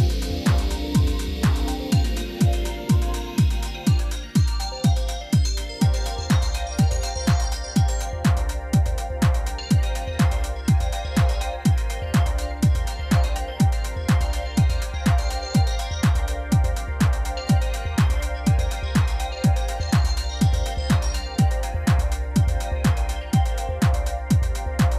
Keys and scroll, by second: 0.6-2.9 typing, 4.4 g, 6.9 Tab, 14.7 Tab, 16.2 ctrl+r, 17.9 ctrl+r, 18.6 2, 19.9 ctrl+b, 20.9 Return, 21.6 ctrl+-, 24.7 s.